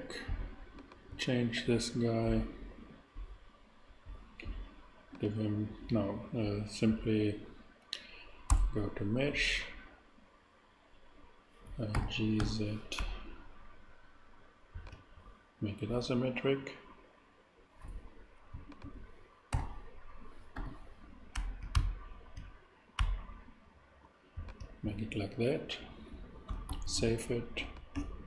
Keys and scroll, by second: 8.5 Tab, 11.9 g, 12.4 z, 12.9 ctrl+z, 19.5 super+g, 20.5 z, 21.3 ctrl+z, 26.7 super+s.